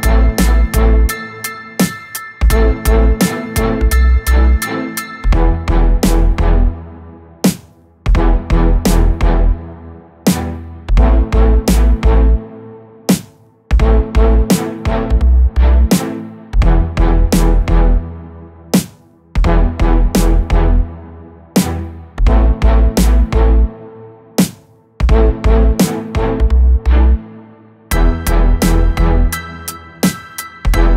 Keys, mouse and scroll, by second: 0.0-3.5 drag, 4.4-7.5 drag, 14.5-15.8 scroll up 2, 17.8-19.5 middle drag, 19.5 click, 20.9-23.1 drag, 24.5 click, 25.2 click, 25.8 middle click, 26.4-29.5 right drag, 29.5 click, 30.0-30.9 scroll up 2.